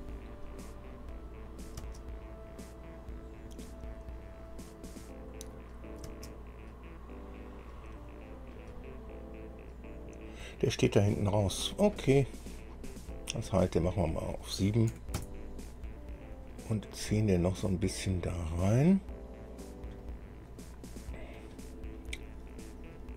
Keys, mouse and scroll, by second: 1.1 click, 2.0 space, 3.5 scroll up 2, 5.7 click, 6.3 space, 8.7-10.8 drag, 12.3 scroll down 1, 14.1 click, 15.1 KP_7, 15.3 KP_Enter, 16.7-18.9 drag, 20.2-21.7 drag, 22.7 click.